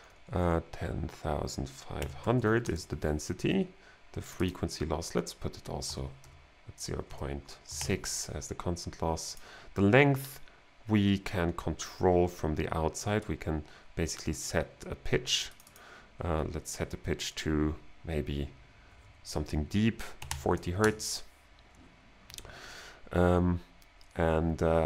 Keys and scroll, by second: 0.0-0.1 typing, 1.8-2.7 typing, 5.9-8.3 typing, 20.2 4, 20.8 Return.